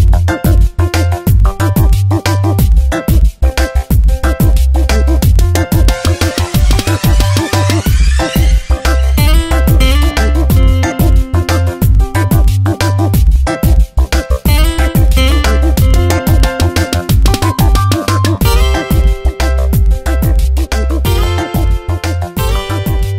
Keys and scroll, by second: 11.7 Tab, 12.9 space, 21.4 Return, 21.8 Tab, 22.4 v.